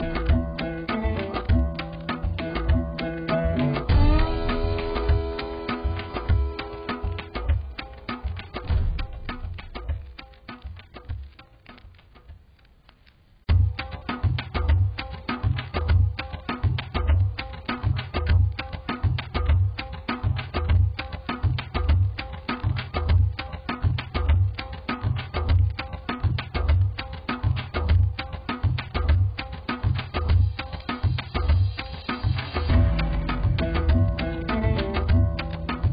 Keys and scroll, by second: 1.3-3.4 typing, 20.4 [.